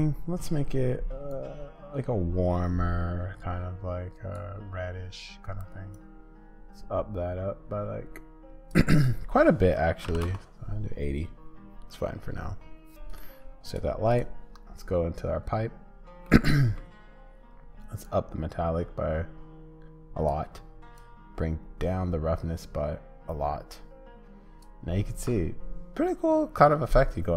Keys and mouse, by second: 13.6-16.2 drag, 16.2 middle click.